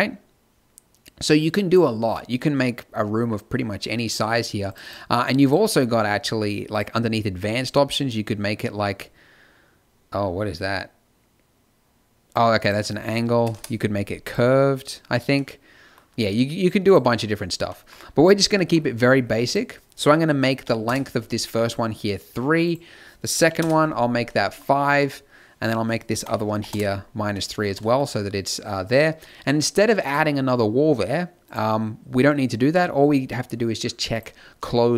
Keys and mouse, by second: 1.6 middle click, 9.1-12.2 middle drag, 12.5-21.3 middle drag, 22.6-24.4 middle drag, 25.6-27.3 middle drag, 30.0-34.9 middle drag.